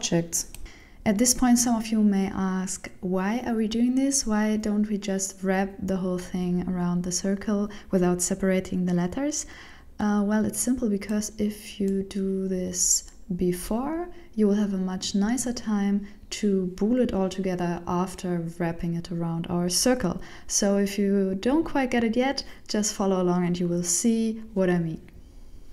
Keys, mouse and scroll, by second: 0.7 right click, 1.5 ctrl+l, 1.9 p, 3.3 right click, 3.9 ctrl+l, 4.2 p, 5.1 shift+middle click, 5.8 right click, 6.5 ctrl+l, 6.7 p, 8.0 right click, 8.7 ctrl+l, 8.8 p, 10.2 right click, 10.7 ctrl+l, 10.9 ctrl+p, 12.7 ctrl+y, 13.6 ctrl+z, 14.3 right click, 15.1 ctrl+l, 15.3 p, 16.9 right click, 17.6 right click, 19.2 ctrl+l, 19.5 p, 20.7 Tab, 21.2 right click, 21.9 g.